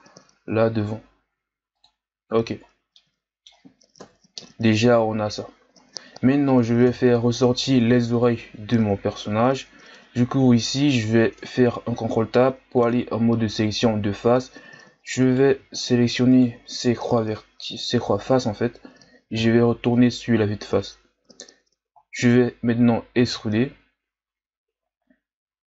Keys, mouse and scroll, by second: 2.4 z, 2.8 scroll down 1, 3.0-4.0 middle drag, 4.0 KP_1, 6.8 KP_3, 7.7-8.3 ctrl+scroll up 1, 8.3-8.8 scroll up 1, 15.2 right click, 15.7 shift+right click, 16.3 shift+right click, 19.4 KP_1, 20.8-23.1 ctrl+scroll up 2, 23.1 e.